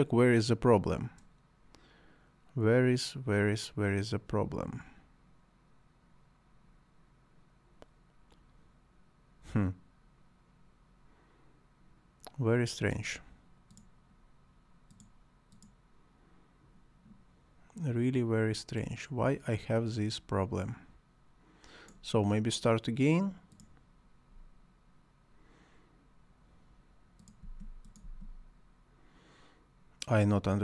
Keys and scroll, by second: 27.5 space.